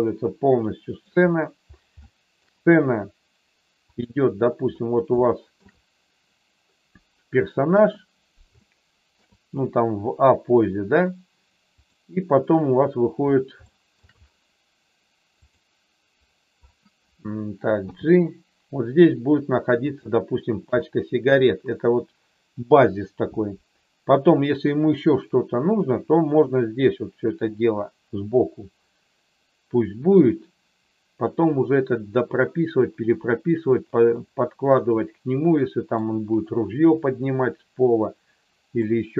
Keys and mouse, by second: 2.0 shift+middle click, 4.0 click, 5.3 shift+middle click, 7.6 KP_1, 8.6 shift+middle click, 11.8 click, 13.6 shift+middle click, 15.5 click, 17.8 g, 19.8 click, 20.8 shift+middle click, 34.7-35.9 middle drag, 38.9 middle click.